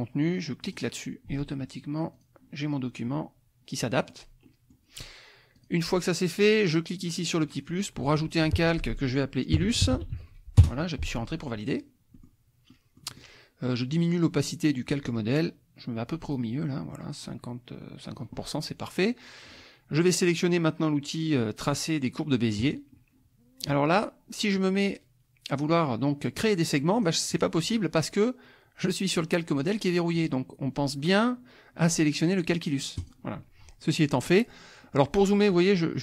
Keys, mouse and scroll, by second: 0.6 click, 2.1 click, 4.0 click, 4.4 click, 5.5 click, 7.4 click, 9.3-10.6 typing, 12.1 click, 12.7 click, 14.0 click, 16.2 click, 17.2-18.4 drag, 22.6 click, 26.4 click, 26.9 click, 27.3 click, 27.9 click, 33.0 click, 34.1 middle click, 34.7 middle click, 34.8 click.